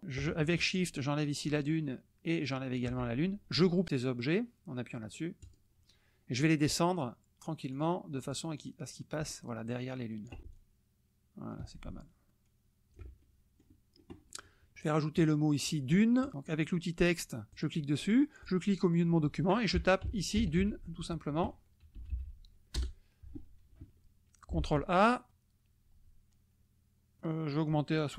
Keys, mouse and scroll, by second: 0.8 shift+click, 2.5 shift+click, 5.4 click, 7.7 click, 8.2 click, 10.5 ctrl+click, 13.3 ctrl+shift+middle click, 13.3-13.6 ctrl+shift+scroll up 3, 13.6 drag, 15.2 click, 16.2 click, 17.5 click, 18.5 click, 19.8-21.4 typing, 22.0 Left, 22.8 BackSpace, 24.6 ctrl+a, 27.5 click.